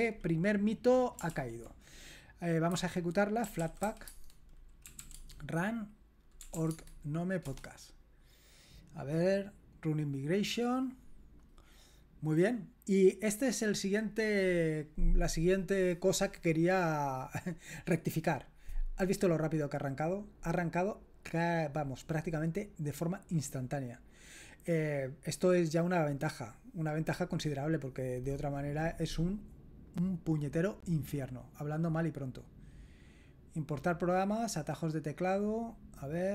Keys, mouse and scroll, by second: 1.3 ctrl+l, 2.7-7.0 typing, 7.4 Return, 12.9-14.0 drag, 29.9-31.4 drag, 32.3 click.